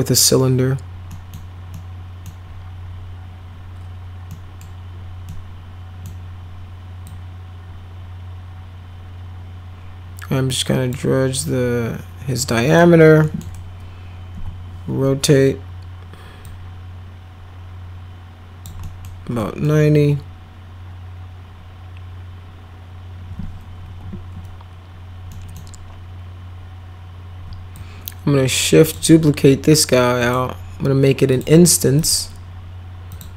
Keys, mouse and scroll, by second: 1.1 middle click, 1.7 middle click, 4.2 middle click, 5.2 middle click, 7.0 click, 12.6 click, 13.2 middle click, 14.3 e, 16.4-18.6 drag, 18.8 middle drag, 19.3 middle click, 23.8 w, 25.2 middle click, 27.7-28.9 shift+drag, 30.2 click, 31.2 click, 31.9 click, 33.1 click.